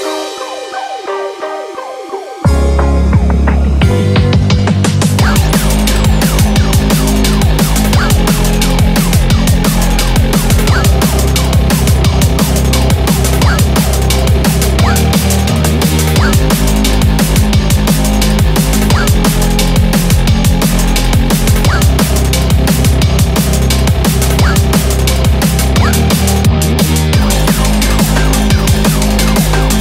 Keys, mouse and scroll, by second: 0.1 click, 0.1 g, 1.9 click, 1.9 g, 2.1 g, 3.3 click, 3.9 g, 4.3 click, 4.7 g, 6.1 click, 6.2 scroll up 4, 7.0 shift+middle click, 8.2 click, 9.3 g, 11.2 click, 11.2 g, 11.4 g, 12.6 click, 14.2 g, 15.2 g, 16.3 click, 16.4 g, 17.2 click, 17.3 click, 17.3 g, 19.1 2, 20.3 scroll down 2, 20.5 shift+middle click, 20.5 click, 20.5 scroll up 4, 21.1 g, 22.7 click, 22.7 g, 23.8 click, 24.7 click, 24.8 click, 24.8 g, 25.8 click, 25.9 g, 27.3 click, 27.3 g, 28.0 g, 29.0 click, 29.6 g, 29.7 shift+middle click, 29.7 click, 29.7 scroll down 3.